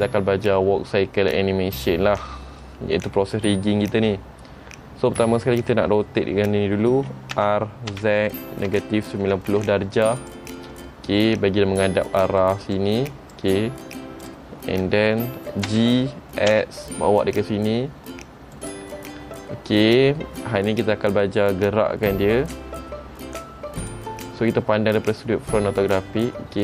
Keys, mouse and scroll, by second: 2.0 middle click, 11.0 middle click, 12.3-12.9 scroll up 1, 12.9 middle click, 12.9 click, 14.4 click, 14.7 scroll down 3, 15.8 g.